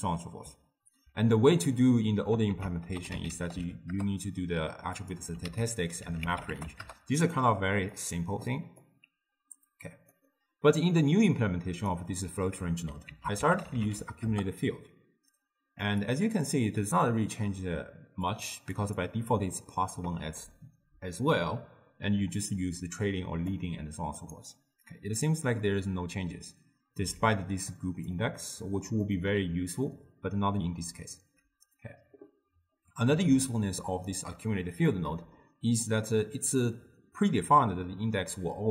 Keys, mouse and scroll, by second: 2.5 ctrl+a, 5.5 ctrl+a, 8.9-12.0 drag, 13.1 ctrl+a, 13.8 c, 16.5-17.8 middle drag, 17.8-19.6 typing, 18.3 click, 18.8 click, 19.4 click, 22.5-24.3 drag, 27.2 d, 27.7 d, 27.8 click, 28.1-28.4 d, 28.7-29.1 drag, 29.1 d, 33.2 d, 33.5 right click, 34.2 d, 34.9-38.0 middle drag.